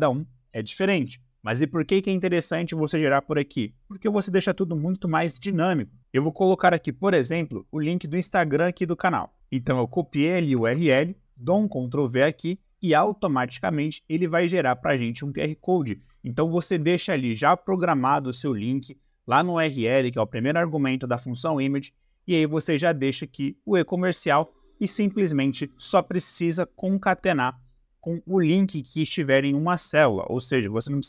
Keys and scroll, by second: 10.6 ctrl+v.